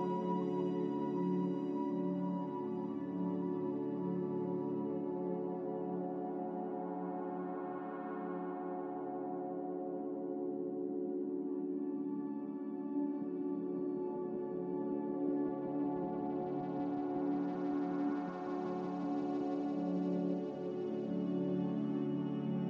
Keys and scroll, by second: 4.7 ctrl+z, 5.1 ctrl+z, 5.4 ctrl+z, 8.5-10.2 typing, 10.6 Return, 12.1-13.0 typing, 12.3 Return, 14.2-15.0 typing, 15.1 Return, 16.5-16.9 typing, 18.4-19.2 typing, 22.3-22.6 typing.